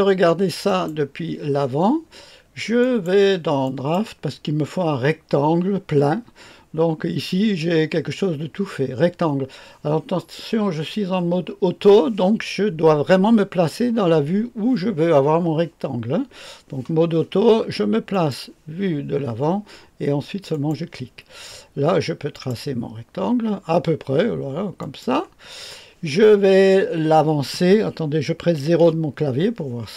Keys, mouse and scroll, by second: 0.6 click, 2.7-4.0 drag, 18.1 click, 20.5 click, 22.3 click, 24.8 click, 28.8 KP_0.